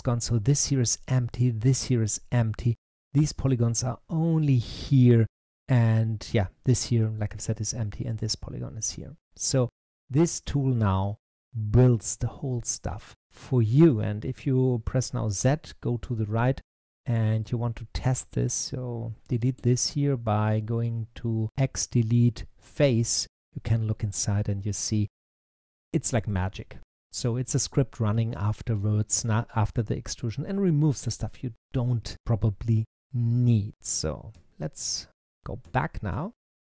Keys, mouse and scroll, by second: 8.8-11.9 middle drag, 15.3 z, 16.7 click, 17.5 middle click, 18.3 click, 19.4 x, 23.0-26.0 middle drag, 34.2 z, 35.3 z, 35.5 z, 36.0 z, 36.6 z.